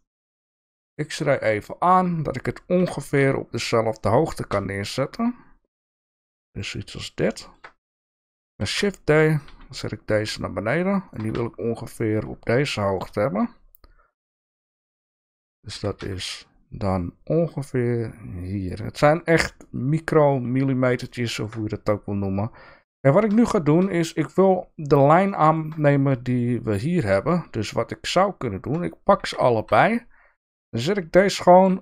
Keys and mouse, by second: 0.9 shift+middle click, 2.8 g, 7.3 shift+middle click, 8.6 shift+d, 12.0 shift+middle click, 12.8 shift+middle click, 15.7 g, 21.2 shift+middle click, 23.4 shift+middle click, 25.3 shift+middle click, 29.2 g.